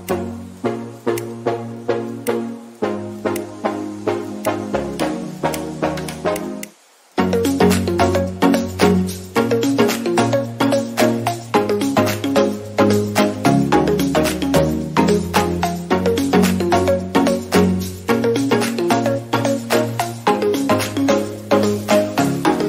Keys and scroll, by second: 2.3 ctrl+alt+z, 5.9 ctrl+alt+z, 10.1 ctrl+alt+z, 11.3 ctrl+alt+z, 22.0 ctrl+alt+z.